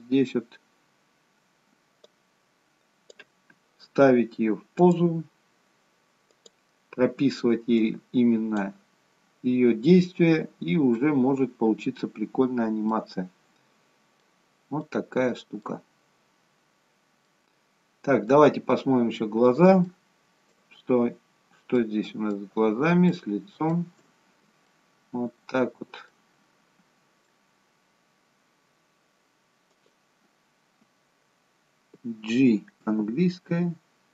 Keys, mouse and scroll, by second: 2.1 click, 4.9 click, 6.8 click, 7.8 click, 9.6 scroll down 1, 10.8 scroll down 1, 11.0 middle click, 12.6-13.0 scroll up 2, 13.0 middle click, 16.0-17.4 scroll down 2, 17.4 middle click, 18.7-19.6 scroll up 10, 20.0 shift+middle click, 21.8 shift+middle click, 23.2 shift+middle click, 24.8 shift+middle click, 26.1 middle click, 27.7-28.1 scroll down 1, 29.9 click, 33.0 g.